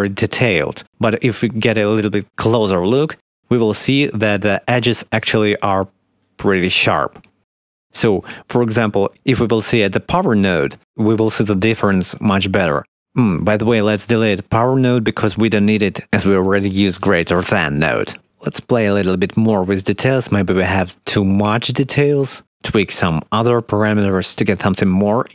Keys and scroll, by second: 11.6 1, 16.2 ctrl+x.